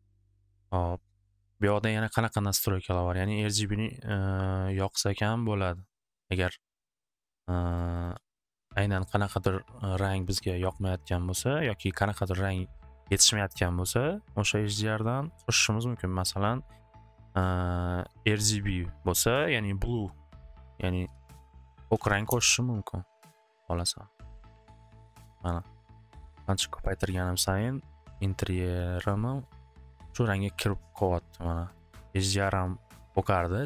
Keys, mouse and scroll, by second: 2.2 click, 3.7 click, 3.9 click, 4.2 click, 7.3 click, 7.7 click, 8.0 click, 8.2 typing, 8.3 Return, 9.3 click, 20.4 click, 20.4-22.5 typing, 20.5 click, 21.7 click, 21.8 click, 24.3 typing, 25.6-28.4 typing, 31.7 click, 31.9 click.